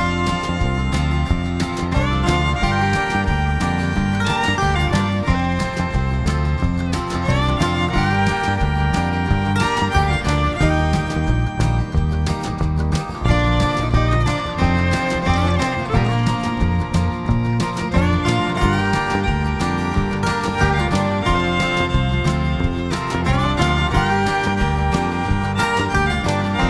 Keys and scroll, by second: 1.6 g, 6.3 ctrl+shift+[, 11.2-12.0 typing, 15.5 ctrl+shift+[, 20.0 ctrl+], 20.7 g, 22.2 ctrl+shift+[, 22.9 ctrl+].